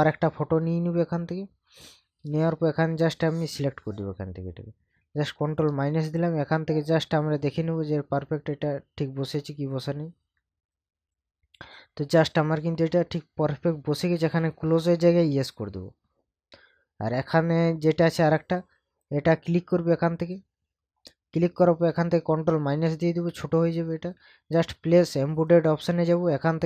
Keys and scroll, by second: 5.6 ctrl+KP_Subtract, 22.5 ctrl+KP_Subtract.